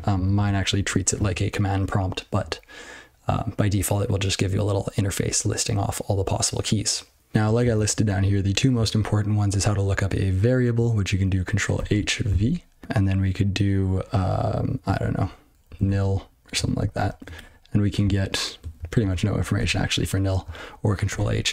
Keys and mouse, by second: 7.5 ctrl+space, 7.7 ctrl+n, 8.1 ctrl+g, 8.3 ctrl+p, 19.5 q.